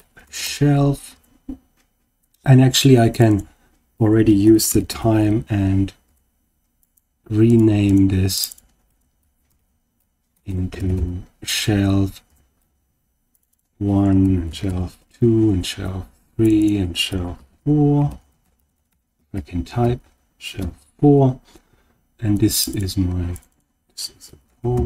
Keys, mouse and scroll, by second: 3.1 click, 3.2-6.0 drag, 6.7 click, 7.4 click, 7.8 click, 8.3 click, 8.5-12.2 drag, 10.4 BackSpace, 13.2 click, 13.5-15.4 drag, 16.3 click, 16.5-20.7 drag, 18.5 BackSpace, 18.6 BackSpace, 22.2 click, 22.6 click, 23.2 click, 23.4-24.8 drag.